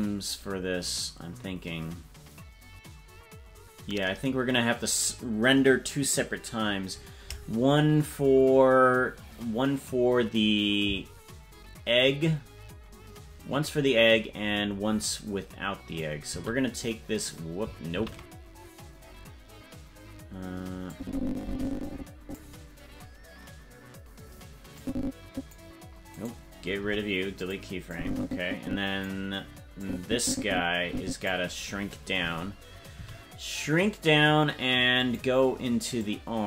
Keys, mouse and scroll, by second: 7.6-9.8 scroll down 4, 9.8-16.0 drag, 16.3 a, 18.2 ctrl+z, 20.9-22.3 drag, 24.7 click, 26.1 right click, 26.7 Delete, 27.9-29.0 drag, 29.8-31.3 drag, 32.9 s, 35.9-36.4 drag.